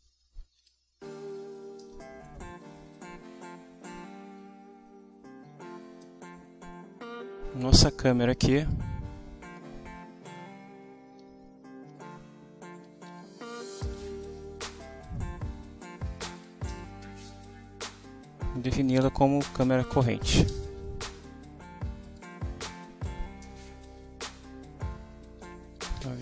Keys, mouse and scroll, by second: 0.0-1.0 typing, 1.8 Return, 4.4 Down, 8.5 click, 11.2 End, 11.9-14.7 typing, 16.0-17.4 typing, 20.5 Return, 22.0 click, 25.0 shift+Up, 25.2 shift+End, 26.0 ctrl+shift+Down.